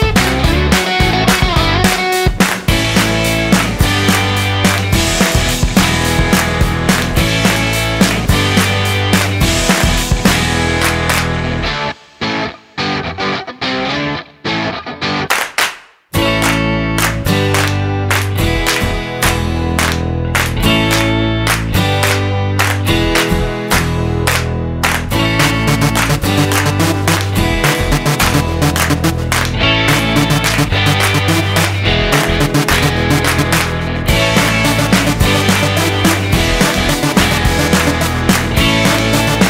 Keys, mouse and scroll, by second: 3.7 click, 7.6 click, 9.5-10.5 scroll down 4, 15.7-16.6 scroll up 11, 20.0 click, 23.4 click, 34.0 click, 36.2-36.9 scroll down 7, 36.9 middle click, 38.6 click.